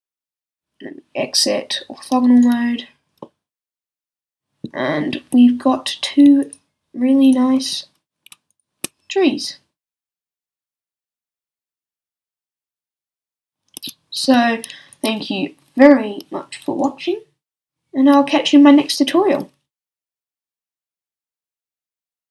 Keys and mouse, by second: 6.4-9.4 middle drag, 9.4-22.3 drag, 9.4-11.0 right drag, 13.7-14.9 middle drag, 13.7-14.9 right drag, 13.7 z, 14.2 z, 20.4-22.3 middle drag, 20.4-22.3 right drag.